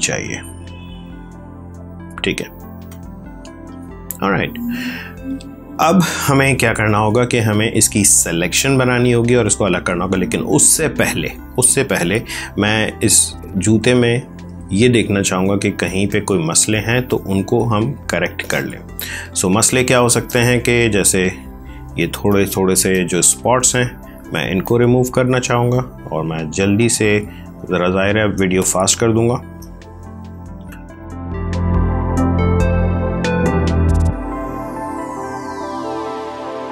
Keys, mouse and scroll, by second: 13.3 click, 15.3 space, 15.7 ctrl+click, 18.3 click, 21.9 space, 22.2 click, 22.4 space, 23.3 click, 28.2 space, 28.5 click, 28.7 space, 29.0 click, 29.1 space, 29.9 click, 31.3 space, 31.7 click, 33.1 space, 33.3 click, 33.8 space, 34.1 click, 34.2 space, 35.9 click, 36.5 space.